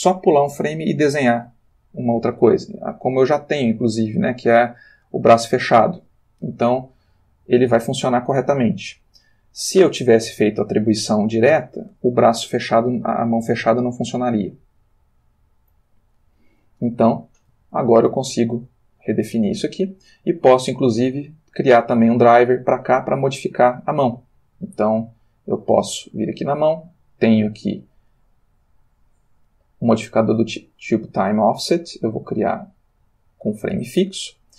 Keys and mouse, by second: 3.0-4.5 drag, 11.4-16.8 drag, 16.9 a, 18.6 alt+g, 21.2 click, 25.4 click, 28.4 click, 29.3 click, 32.0 click, 32.9 click.